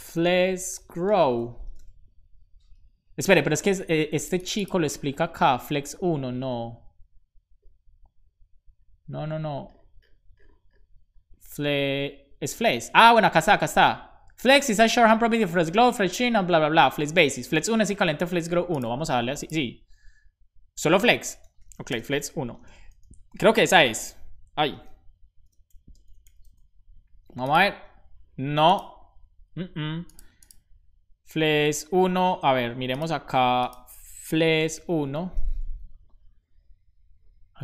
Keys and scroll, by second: 20.7 Return, 20.9-22.5 typing, 23.2 super+s, 24.7 ], 25.3 BackSpace, 26.3 super+s.